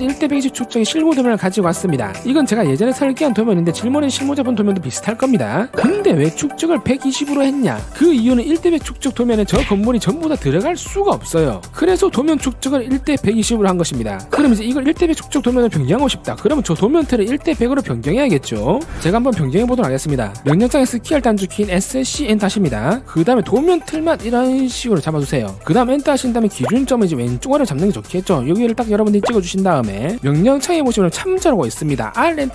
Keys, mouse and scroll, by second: 22.0 s, 22.4 c, 22.8 right click, 23.6 click, 24.5 click, 24.9 click, 25.4 click, 26.6 right click, 30.0 click.